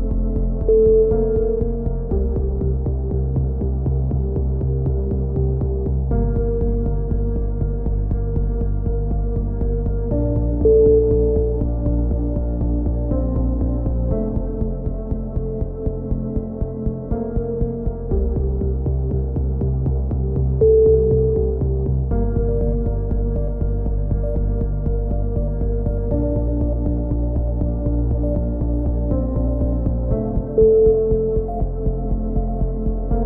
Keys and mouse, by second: 0.5 right click, 0.8 f, 0.9 a, 1.1 click, 2.6 right click, 2.8 e, 5.2 KP_3, 5.6-7.1 drag, 7.6 a, 7.8 click, 8.4 right click, 9.0 KP_3, 9.3 click, 10.2 a, 10.3 z, 10.4 click, 13.5 click, 14.6-15.7 drag, 14.9 KP_7, 15.7 z, 15.9 ctrl+r, 17.8 right click, 18.1 g, 19.7 a, 20.0 right click, 20.4 f, 20.5 a, 20.9 z, 21.1 click, 24.5 click, 24.5 KP_7, 24.7 z, 29.0 right click, 29.7 e, 30.2-31.9 drag, 32.8 right click, 33.1 e.